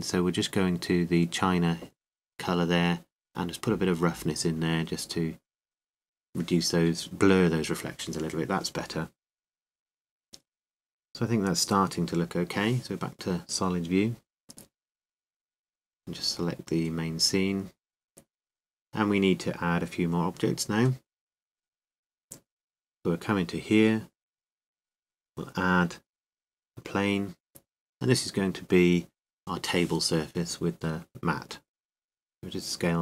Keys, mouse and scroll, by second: 13.2-15.2 drag, 17.1-19.0 drag, 21.1-23.4 drag, 24.1-25.9 drag, 25.3 KP_7, 27.8 click, 30.1 g, 31.1-33.0 drag, 32.1 s.